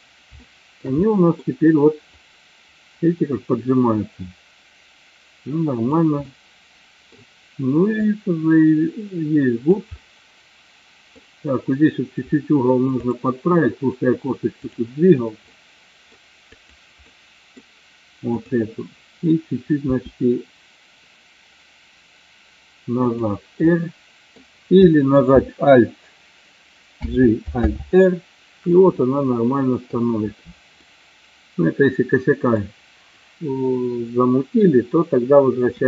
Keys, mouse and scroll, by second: 0.5 shift+middle click, 1.0 middle click, 2.1-6.0 drag, 6.2 middle click, 8.0-9.9 drag, 10.0-11.4 middle drag, 17.1 middle click, 18.4 click, 19.9 r, 23.7-24.5 middle drag, 27.0 alt+g, 27.7 alt+r, 29.3-30.1 middle drag, 30.9-32.6 middle drag.